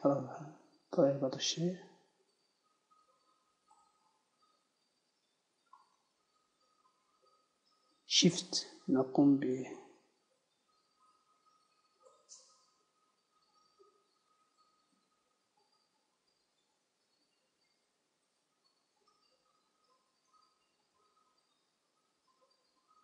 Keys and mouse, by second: 1.4-2.8 drag, 4.8 z, 6.2 z, 8.9-10.4 drag, 17.2 ctrl+z, 19.2-21.5 drag, 21.5 KP_1, 22.4 z.